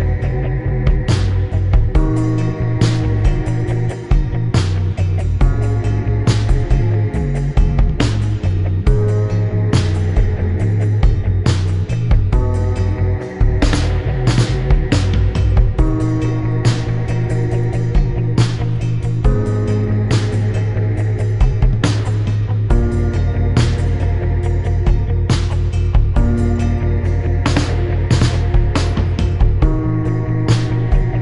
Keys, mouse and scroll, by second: 0.8 click, 2.4 click, 3.6 click, 4.4 click, 5.7 click, 6.1 click, 10.1 click, 13.6 click, 15.0 ctrl+click, 16.5 ctrl+click, 17.5 ctrl+click, 17.8 click, 19.0 click, 20.8 click, 22.0 click, 23.1 click, 24.5 click, 25.1 click, 25.6 click, 26.5 shift+click, 29.8 click, 30.2 click, 30.9 click.